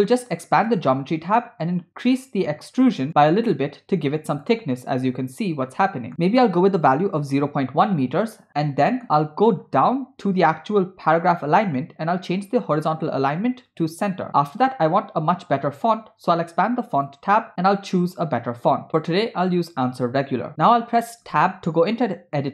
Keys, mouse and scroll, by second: 0.6 click, 3.1-4.6 drag, 5.0 scroll down 1, 5.1 scroll down 1, 5.7-6.1 middle drag, 6.1-7.4 drag, 8.5 middle click, 9.6-10.0 scroll down 5, 11.2 scroll down 2, 11.3 scroll up 1, 12.4-14.0 drag, 14.6-15.6 scroll up 4, 15.6 scroll down 2, 15.8 scroll up 1, 15.9-16.8 scroll down 1, 16.9 click, 21.3 Tab.